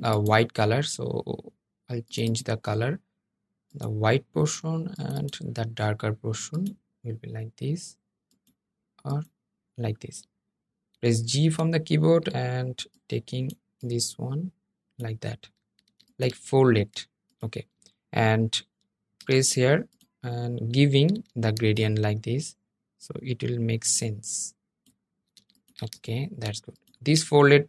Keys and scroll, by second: 12.3 g, 18.3 i, 21.0 g.